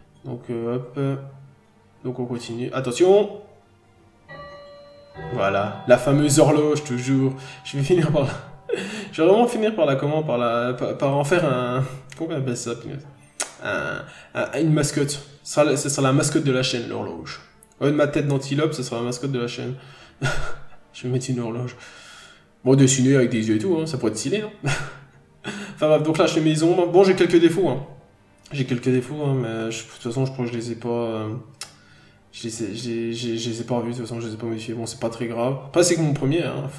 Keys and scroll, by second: 0.0 n, 2.0-2.4 scroll down 1, 3.6 scroll up 1, 21.4 p, 22.6 n, 22.9 f, 25.7-26.1 scroll down 1, 26.1 n, 27.0 scroll up 1, 33.5 n.